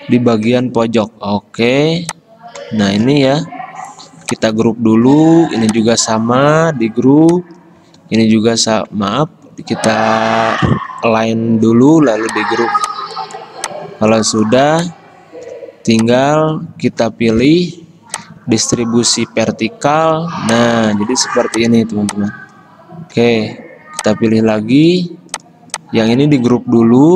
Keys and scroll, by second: 4.3 ctrl+g, 6.9 ctrl+g, 8.2 ctrl+g, 9.4 ctrl+z, 11.0 ctrl+g, 25.0 ctrl+z.